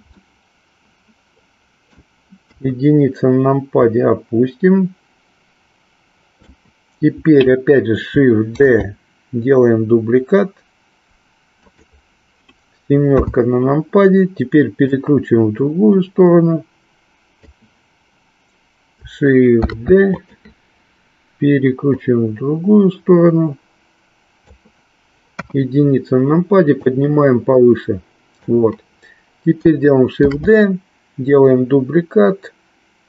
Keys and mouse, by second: 0.1-2.1 middle drag, 2.5 KP_1, 3.8-6.4 drag, 13.0 KP_7, 14.9-17.6 drag, 20.3 click, 21.9-24.6 drag, 25.4 KP_1, 26.8-28.5 drag.